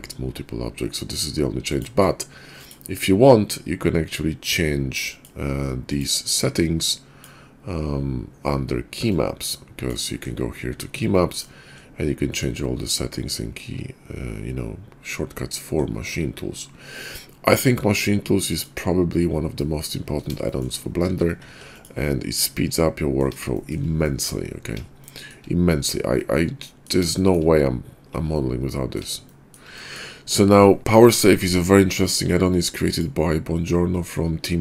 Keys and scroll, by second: 21.1 a, 21.4 x.